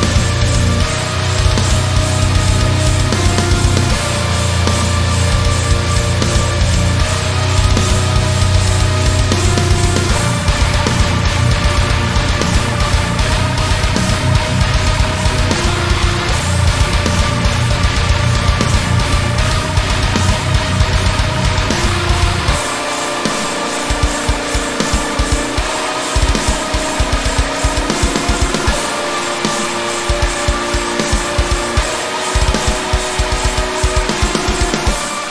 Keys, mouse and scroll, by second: 0.8 click, 1.1 shift+a, 2.7-3.1 scroll down 1, 3.3 click, 4.6 click, 5.4 click, 5.7 click, 6.1 scroll down 1, 6.4-8.2 drag, 7.1-7.5 scroll down 1, 7.5 Tab, 8.0 z, 8.5 g, 9.9 click, 10.3 g, 11.5 click, 11.7 click, 12.2 g, 13.4 click, 13.7 click, 13.8 g, 14.9 click, 15.0 `, 15.4 click, 16.3 s, 17.6 click, 17.7-18.3 scroll up 2, 17.9 shift+middle click, 18.3 g, 18.8 click, 18.9 scroll down 1, 19.3-20.6 shift+middle drag, 19.7 Tab, 20.6-21.8 right drag, 21.8 click, 22.1-24.0 right drag, 24.0 click, 25.2 alt+g, 25.4 click, 26.2 alt+g, 26.5-27.1 shift+middle drag, 27.1 click, 27.4 Tab, 28.2-30.5 middle drag, 28.7 Tab, 29.6 scroll up 2, 29.7 Tab, 30.5 click, 31.0 s, 32.1 click, 32.3 Tab, 32.6 g, 34.0 click, 34.2-35.3 middle drag.